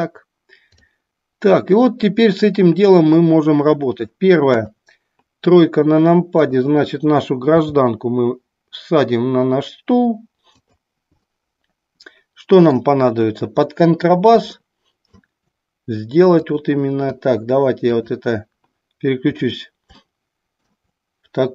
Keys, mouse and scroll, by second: 6.2 click, 7.7 g, 10.7 drag, 11.3-12.7 middle drag, 14.6 middle click, 16.4 click, 18.1 click, 19.9-20.7 middle drag.